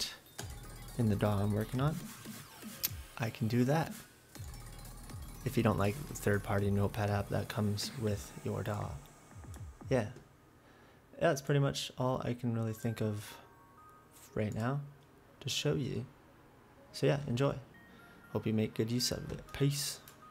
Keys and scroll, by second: 1.6 F8.